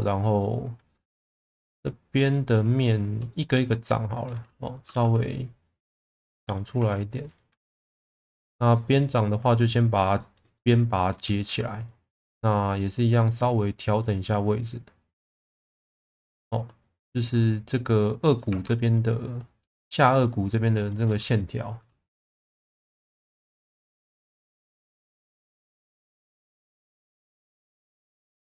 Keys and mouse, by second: 0.4 click, 1.3 middle click, 2.3 middle click, 2.8 shift+click, 3.3 middle click, 5.0 e, 6.5 click, 6.8 1, 7.3 click, 8.1 g, 8.2 b, 8.8 click, 9.3 click, 10.2 shift+middle click, 10.5 alt+middle click, 11.4 1, 11.8 click, 12.5 click, 18.5 2, 18.8 click, 20.1 click, 20.8 shift+click, 22.1 e, 23.4 1, 25.8 s, 26.0 KP_0, 26.1 KP_Enter, 27.3 click, 28.1 click.